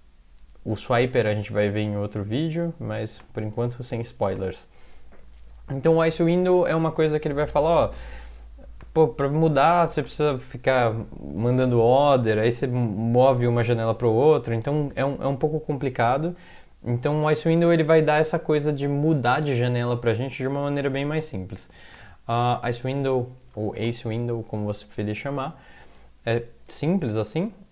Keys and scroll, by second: 23.8 ctrl+c.